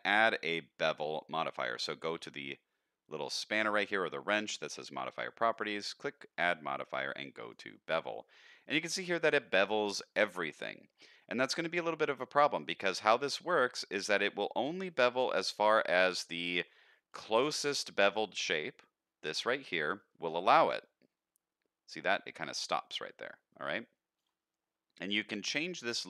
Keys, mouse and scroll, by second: 5.5-7.5 drag, 8.2-8.6 middle drag, 8.8-10.0 scroll up 1, 10.0-11.0 middle drag, 12.0-16.5 shift+drag, 16.9 middle drag, 17.3 scroll up 1, 17.7 shift+middle drag, 20.3-24.2 shift+drag.